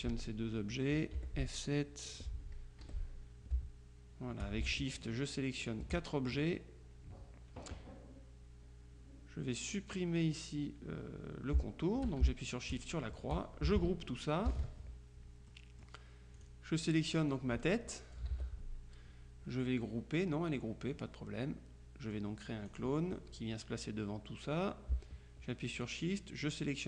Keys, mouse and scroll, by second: 1.3 F7, 2.2 click, 2.9 F1, 5.1 click, 5.7 click, 12.8 click, 14.6 ctrl+g, 15.6 middle click, 16.5 click, 17.4 click, 18.4 ctrl+z, 22.8 click, 25.9 shift+click.